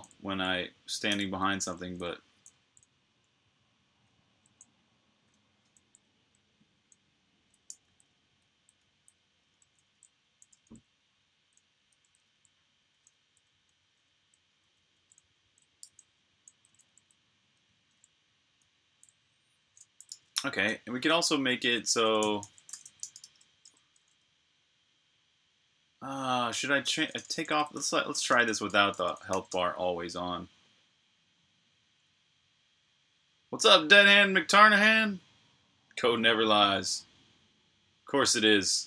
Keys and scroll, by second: 0.9-1.3 typing, 3.6-9.8 typing, 19.9 super+q, 21.8-23.9 typing, 27.1-29.8 typing, 28.9 Escape.